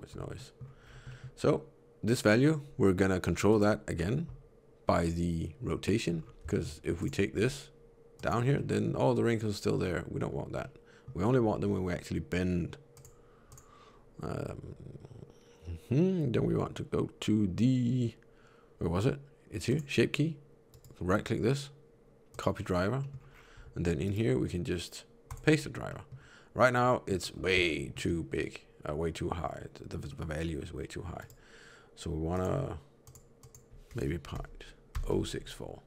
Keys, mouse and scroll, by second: 0.2 middle click, 0.7 scroll up 4, 1.0 middle click, 3.4 click, 5.7-6.2 scroll down 3, 6.4 shift+middle click, 6.9 click, 7.2 r, 8.4 middle click, 10.5 middle click, 11.3 r, 13.3 click, 19.6 click, 20.6 right click, 22.9 middle click, 23.2 scroll up 6, 23.9 right click, 25.8 middle click, 26.7 middle click, 27.2-27.7 scroll up 3, 27.6 shift+middle click, 27.7 shift+middle click, 30.0 middle click, 31.1 right click.